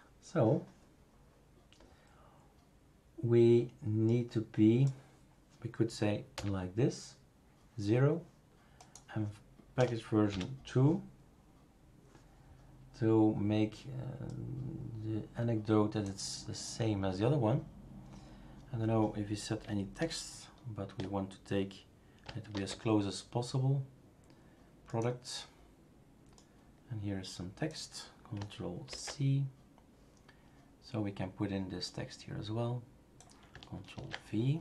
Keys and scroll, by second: 6.3 0, 9.7 BackSpace, 10.3 BackSpace, 22.5 super+f, 28.9 ctrl+c, 33.9 ctrl+v.